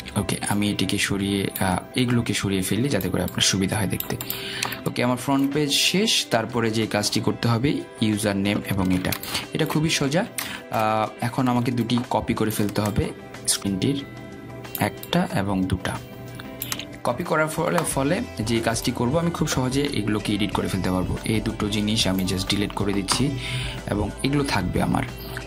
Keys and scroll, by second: 23.2 Delete.